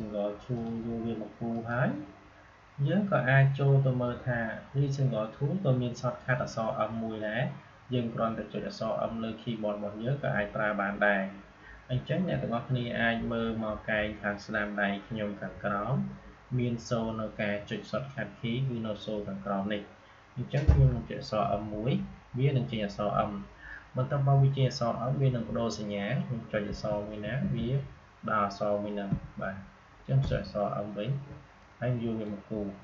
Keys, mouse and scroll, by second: 21.4 m, 26.4-29.0 typing, 30.1 m, 31.5-32.8 drag.